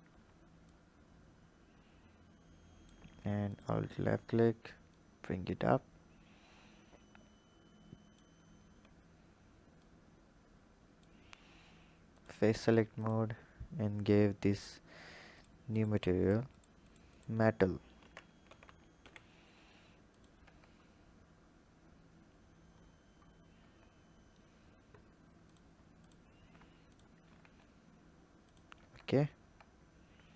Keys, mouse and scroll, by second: 0.6-3.5 shift+drag, 4.8 click, 9.7 click, 12.1 click, 12.9 alt+click, 14.5-20.1 drag, 20.4 Tab, 20.7-21.3 scroll down 3, 21.3-22.8 scroll down 5, 22.8-23.6 scroll up 7, 23.6 Tab, 24.3-25.4 scroll up 1, 25.4 click, 26.0 alt+click, 26.8 alt+shift+click, 27.3 s, 28.8 Tab, 29.3 Tab.